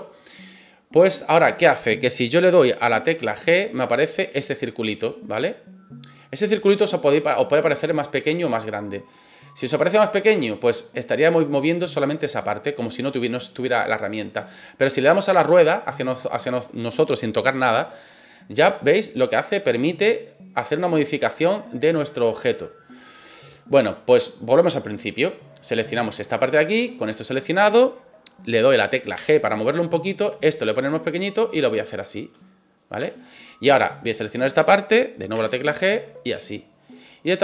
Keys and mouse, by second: 3.1 g, 23.4 right click, 29.1 g, 32.7 click, 33.1 shift+middle click, 33.9 right click, 35.3 g, 36.7 click, 37.0 middle click.